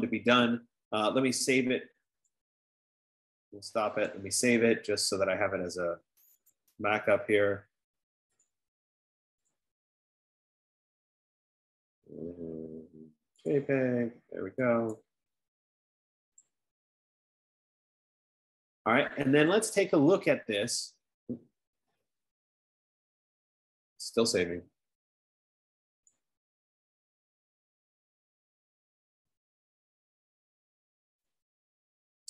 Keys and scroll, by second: 29.3 F15.